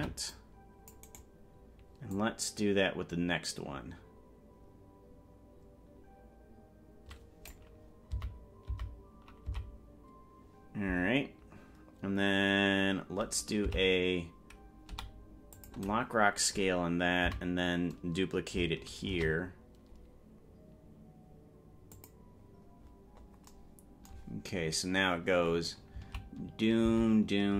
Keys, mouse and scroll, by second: 0.0 c, 2.2-7.7 drag, 8.4 Right, 9.0 Right, 9.8 Left, 14.0 Left, 15.0 i, 17.6 Right, 19.2 shift+d, 23.0-23.6 scroll up 12, 24.6-25.0 scroll up 2, 26.2 Left, 27.0 Right.